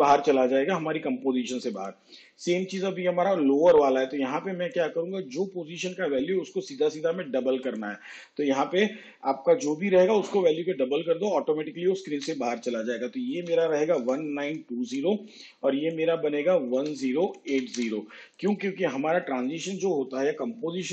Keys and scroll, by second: 14.7 1, 15.2 9, 15.6 2, 16.0 0, 17.9 1, 18.4 0, 18.6 8, 18.9 0.